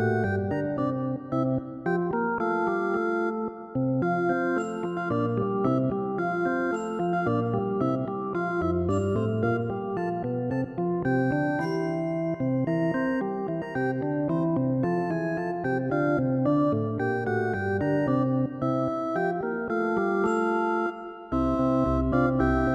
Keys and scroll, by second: 15.0 ctrl+i, 20.8 ctrl+z.